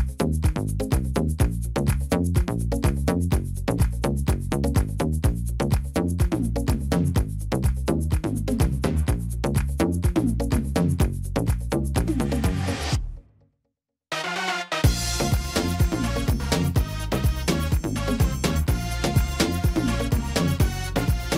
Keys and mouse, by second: 1.4 y, 2.7-3.9 drag, 5.4-6.3 drag, 7.9-9.8 drag, 9.9 drag, 11.3-13.5 drag, 12.7 s, 14.2-14.7 drag, 19.1-20.1 drag, 19.3 y.